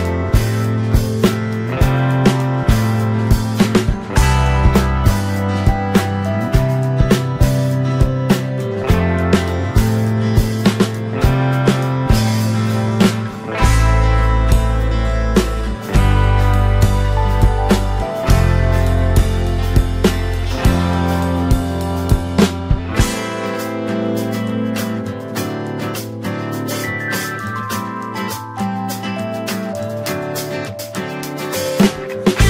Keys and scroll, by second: 3.5 ctrl+t.